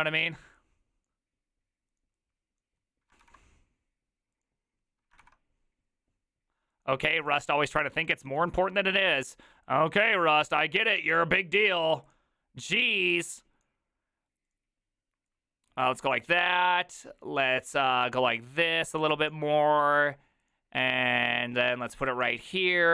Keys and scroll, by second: 3.2 ctrl+c, 5.2 ctrl+v.